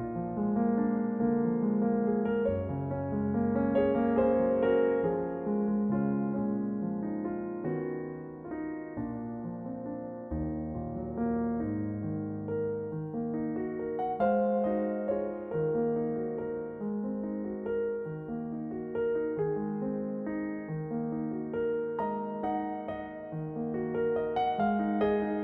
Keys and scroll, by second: 2.2 s, 5.2 r, 12.0 a, 18.3 g, 18.8 g, 25.3 g.